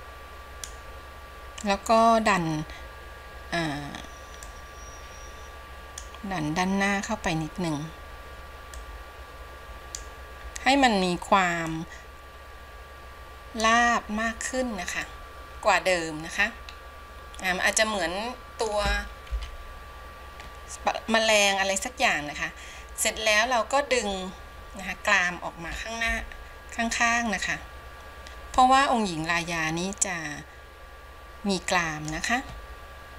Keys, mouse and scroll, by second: 5.0-15.5 drag, 15.5-19.5 middle drag, 19.5 KP_1, 21.5-26.2 middle drag, 26.2 KP_1, 28.7-33.1 drag.